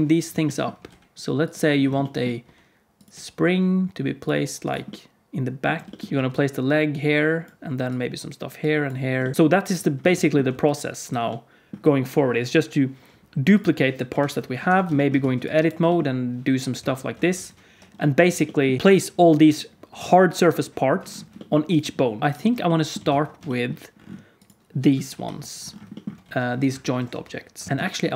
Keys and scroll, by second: 0.8 g, 2.4 r, 3.0 g, 4.3 r, 5.8-9.8 typing, 11.0 d, 14.0 KP_Decimal, 14.6 Tab, 15.1 alt+z, 15.7 g, 17.1 Tab, 17.4 alt+z, 18.1 alt+a, 22.2 alt+shift+a, 23.1 ctrl+s, 25.0 KP_3, 26.1 g, 27.0 r.